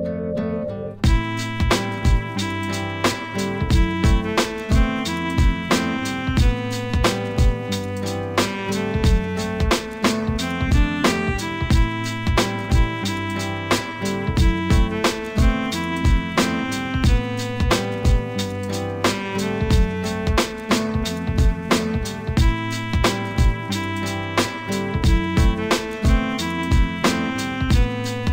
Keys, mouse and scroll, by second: 5.5 click, 6.0 Tab, 6.4 click, 8.3-11.4 drag, 14.7 shift+a, 22.5 g, 24.9 s, 27.3 s.